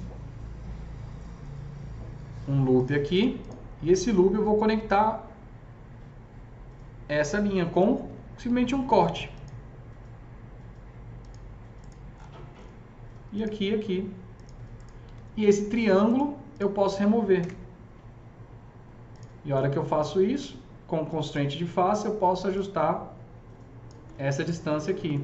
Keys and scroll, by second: 7.8 alt+c, 8.4 s, 15.0 s, 17.3 ctrl+BackSpace.